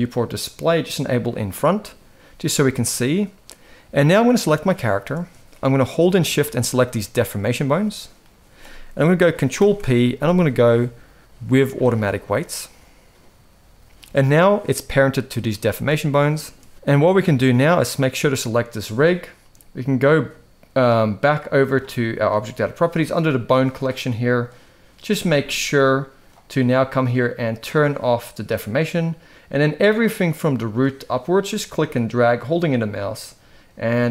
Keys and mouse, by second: 1.0 click, 4.2 click, 6.1 shift+click, 9.3 ctrl+p, 15.4 shift+middle drag, 16.7 alt+a, 17.4 click, 20.9 click, 24.2-26.0 drag, 28.1 click, 30.5 click.